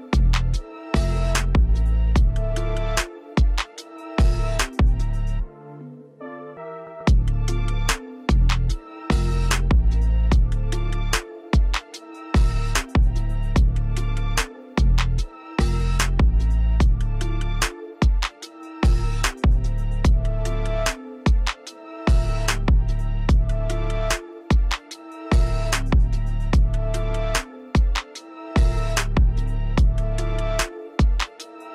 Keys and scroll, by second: 12.3 space, 13.8 space, 21.5 space, 23.9 space.